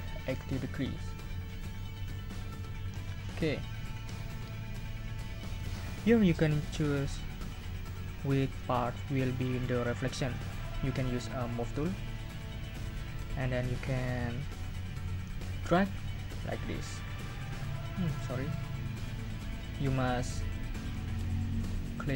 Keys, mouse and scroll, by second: 2.5 click, 12.6 click, 16.8-18.0 drag.